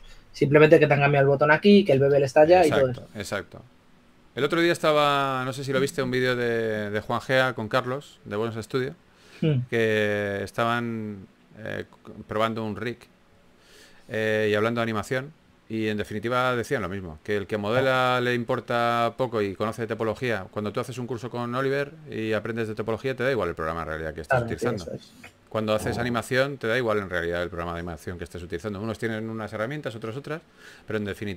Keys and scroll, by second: 4.8 4, 10.7-11.8 typing, 14.7 2, 16.3-17.5 typing, 19.5 typing, 21.7 typing, 23.4-23.8 typing, 25.2 super+z.